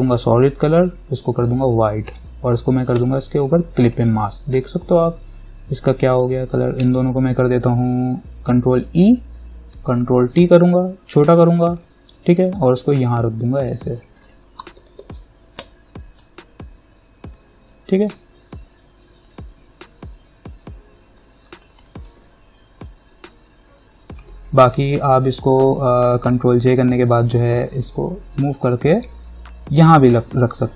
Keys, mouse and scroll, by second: 3.2 alt+click, 7.0 ctrl+click, 9.0 ctrl+e, 10.0 ctrl+t, 10.9-15.0 alt+drag, 15.0 ctrl+=, 15.8 space, 15.9 click, 16.3 space, 16.8-18.8 drag, 18.8-25.5 alt+drag, 25.5 ctrl+j, 25.8 space, 26.0 click, 26.4 space, 27.8-30.7 drag.